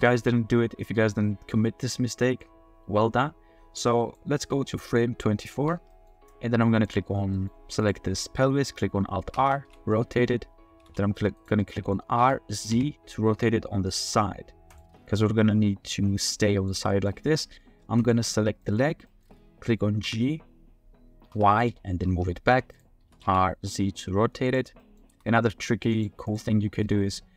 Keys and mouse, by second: 2.4-4.1 drag, 5.0-5.5 drag, 5.9 middle click, 6.8 middle click, 7.3 middle drag, 9.3 alt+r, 9.9 middle drag, 10.7 r, 10.8 z, 11.6 middle click, 12.2 r, 12.7 z, 15.2-15.7 middle drag, 15.7 click, 15.8-16.7 middle drag, 16.9 middle click, 18.0 middle click, 18.6 shift+middle drag, 19.1 middle click, 20.0 g, 21.3 y, 23.0 r, 23.2 z, 24.8 click, 25.1 g, 26.8-27.3 drag.